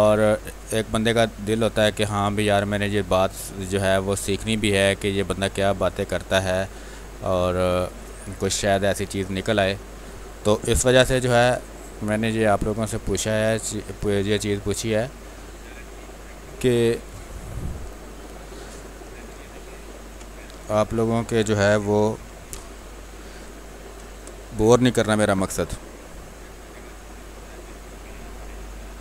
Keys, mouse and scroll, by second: 0.9 space, 1.2 alt+click, 3.7 click, 4.6 space, 4.9 alt+click, 5.8-7.1 drag, 7.1 click, 7.8 space, 8.1 alt+click, 9.9 click, 10.4 ctrl+d, 10.6 w, 11.3 click, 12.9 shift+space, 13.5 space, 14.5 shift+click, 14.6 shift+click, 16.4 shift+space, 16.7 click, 17.0 space, 18.1 click, 19.1 v, 20.2 click, 20.5 click, 22.0 b, 22.4 space, 22.7 ctrl+click, 23.5 ctrl+click, 23.8 click, 24.0 r, 24.3-26.9 drag, 26.9 b.